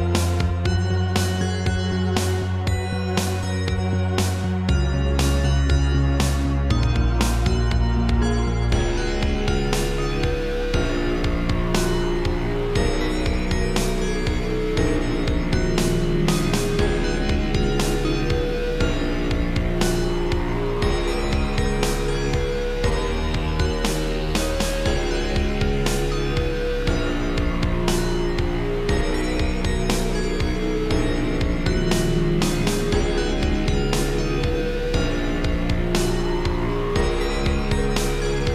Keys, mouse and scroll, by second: 0.9 ctrl+z, 1.7 shift+click, 2.5 scroll down 1, 2.8 g, 4.9 click, 6.9 Right, 7.6 shift+middle click, 8.6 click, 9.5 alt+r, 11.2 click, 12.3 r, 13.1 Escape, 14.2 click, 15.2-15.7 typing, 17.2 click, 18.2 Left, 20.0 Right, 20.2 ctrl+c, 21.0 Left, 21.4 ctrl+v, 23.5 Right, 24.8 shift+middle click, 25.4 click, 26.5 shift+click, 29.2 Left, 29.6 Right, 30.1 Left, 31.2 typing, 32.9 g, 33.0 click, 35.8 scroll down 3, 36.2 middle click.